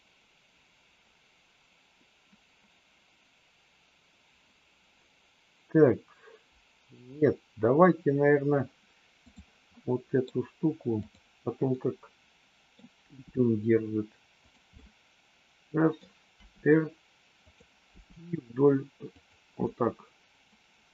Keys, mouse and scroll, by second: 9.2 click, 9.7 middle click, 10.9 click, 11.8-12.8 middle drag, 13.1 g, 14.8-16.1 middle drag, 16.3 r, 17.9 g, 19.6-20.9 middle drag.